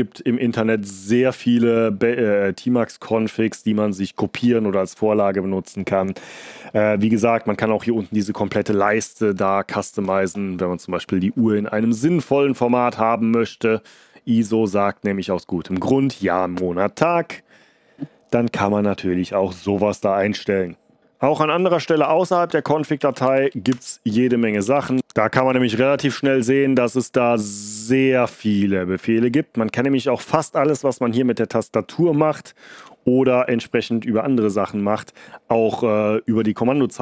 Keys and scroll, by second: 22.0 Escape, 22.3-23.3 typing, 23.6 Return, 24.3-25.3 typing, 25.4 Page_Down, 26.1 Page_Down, 26.1-30.2 Page_Down, 32.7 q.